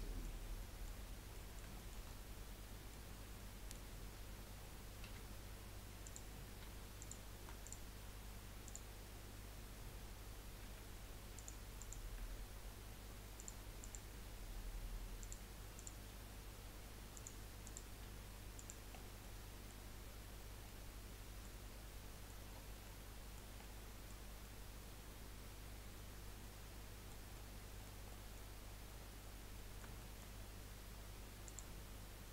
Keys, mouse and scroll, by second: 3.0-3.3 scroll up 2, 3.3-5.0 middle drag, 6.0 click, 7.0 shift+click, 7.6 click, 8.6 click, 10.6 g, 11.8 click, 12.6 g, 13.8 click, 15.7 g, 15.8 click, 17.6 click, 18.9-19.2 scroll down 2, 19.2-21.6 middle drag, 21.6-22.1 scroll down 6, 22.1 middle click, 22.5-22.9 scroll down 5, 22.9-28.4 middle drag, 28.4-29.5 scroll up 13, 29.6 middle click, 30.4 scroll up 2, 31.4 click.